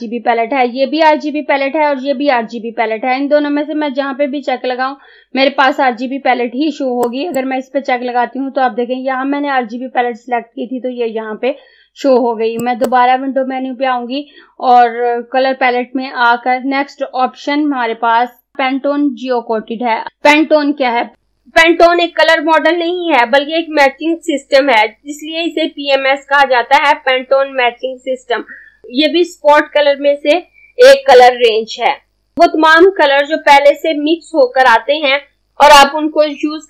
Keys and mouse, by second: 7.1 click, 12.7 click.